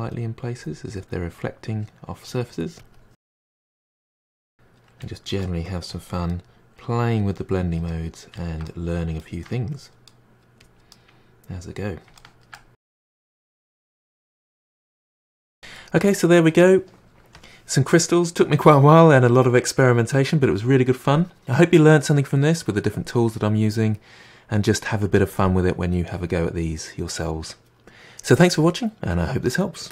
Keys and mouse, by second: 0.0 drag, 0.2-0.7 middle drag, 0.8 middle drag, 1.1 drag, 1.3-2.0 middle drag, 2.0 click, 2.2-2.9 middle drag, 2.9 click, 3.1-5.1 ctrl+middle drag, 5.1 click, 5.2-6.6 middle drag, 6.6 drag, 6.8 middle drag, 7.0 click, 7.1-9.7 middle drag, 9.8-10.2 middle drag, 10.2 drag, 10.3 middle drag, 10.5 click, 10.7-12.5 middle drag, 12.5 click, 12.7-13.2 middle drag, 13.2-13.6 drag, 13.6-15.6 middle drag, 15.6 g, 15.9-29.9 middle drag.